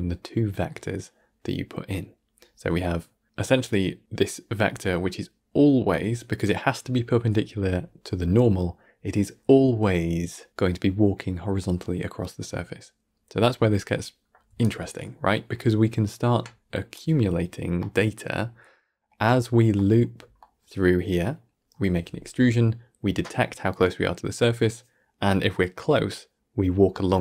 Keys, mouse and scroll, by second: 6.9 d, 13.0-14.3 scroll down 1, 14.3 d, 14.5-16.8 right drag, 16.8 d, 17.7-18.7 middle drag, 18.7 scroll down 4, 19.0 middle click, 19.5 scroll down 3, 19.6 middle click, 20.0 scroll down 1, 20.3-23.4 middle drag.